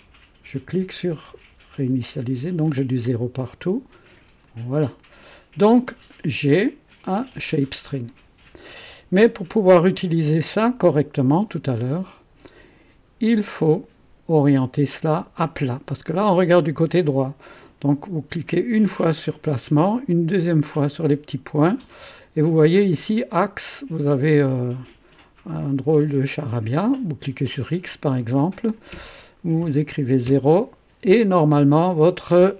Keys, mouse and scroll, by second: 1.1 click, 4.4 click, 7.3 click, 18.9 click, 20.7 click, 25.9 click, 27.2 click, 28.2 click, 29.6 KP_0, 30.2 KP_Enter.